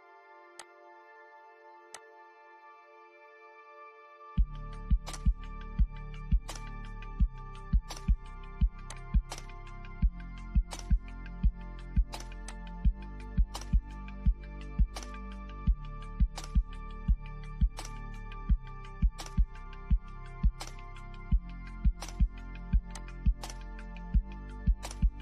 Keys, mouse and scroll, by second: 4.1 click, 7.8 click, 11.4 click, 12.7 Right, 19.1 scroll down 1, 19.7-21.8 middle drag, 21.8 click, 22.6 Left.